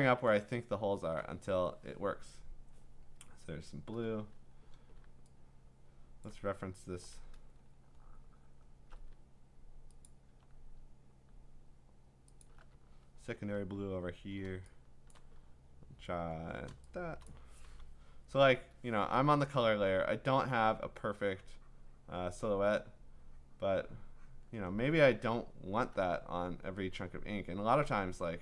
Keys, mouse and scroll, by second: 0.0 click, 1.0 click, 1.2 click, 5.5-6.3 scroll, 6.3 click, 7.5-8.6 scroll, 10.0 alt+click, 12.4 alt+click, 12.8-14.3 scroll, 14.8-15.7 typing, 15.1 click, 15.4 click, 15.4-16.7 scroll, 17.3 click, 17.7 b, 20.2 click, 22.5 click, 24.3 click, 27.1 click.